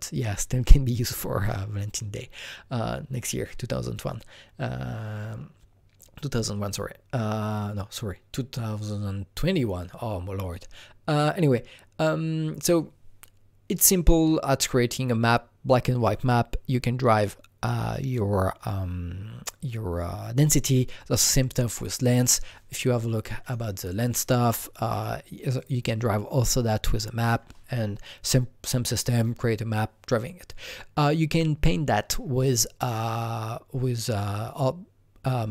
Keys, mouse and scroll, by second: 23.4 click, 24.9 click, 25.6 click.